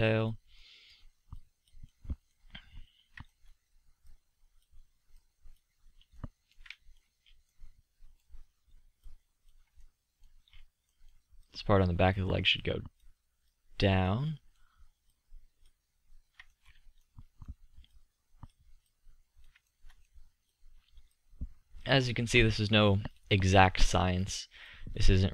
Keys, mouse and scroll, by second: 0.7-2.5 drag, 3.6-6.5 drag, 6.6 drag, 7.8 middle drag, 9.1-11.0 middle drag, 11.5-13.8 middle drag, 14.1 middle drag, 21.9-23.3 middle drag.